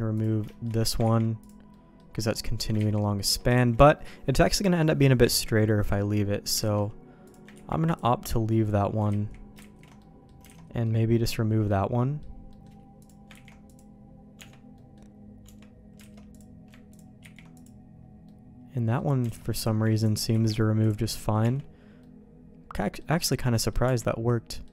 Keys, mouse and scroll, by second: 0.1 click, 0.5 shift+middle click, 1.0 ctrl+e, 1.7 middle click, 2.8 ctrl+z, 3.5 ctrl+shift+z, 5.2 ctrl+z, 6.6 alt+a, 7.2 click, 7.5 ctrl+e, 8.6 middle click, 9.1 ctrl+z, 9.6 ctrl+shift+z, 10.0 middle click, 10.4 alt+a, 10.8 middle click, 11.7 middle click, 12.0 click, 12.5 middle click, 13.0 click, 13.3 ctrl+e, 14.3 Tab, 14.7 middle click, 15.4 Tab, 16.1 alt+a, 16.3 click, 16.9 ctrl+click, 17.2 ctrl+e, 18.2 middle click, 19.3 alt+a, 19.6 click, 20.3 ctrl+e, 21.4 Tab, 22.0-23.0 middle drag, 23.1 middle click, 23.6 middle click, 23.8 Tab, 24.5 middle click.